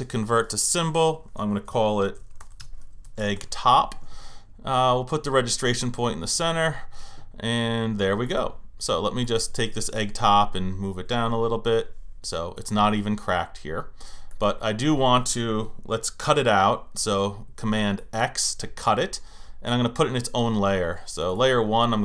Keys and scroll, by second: 10.7 Down.